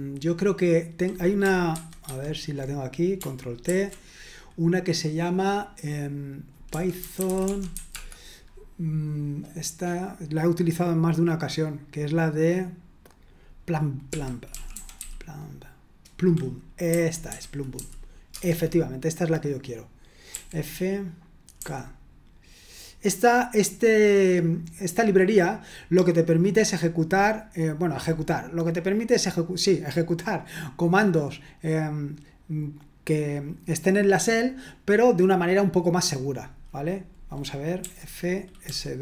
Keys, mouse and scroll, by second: 1.7 super+1, 2.1 super+2, 3.7 ctrl+t, 6.4-8.2 typing, 13.8-15.5 typing, 16.6-18.3 typing, 20.3 typing, 37.8-39.0 typing.